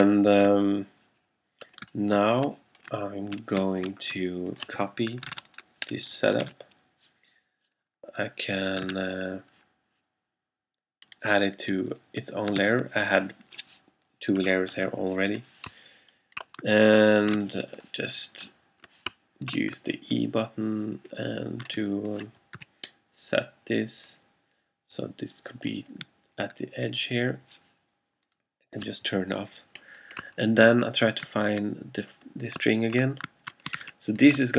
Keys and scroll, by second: 0.5 alt+space, 1.9 alt+space, 3.6 alt+space, 5.4 super+c, 6.6 super+f, 9.0 super+x, 12.6 super+f, 14.4 e, 17.5 alt+shift+space, 21.8 alt+space, 22.6 v, 33.9 alt+shift+super+z.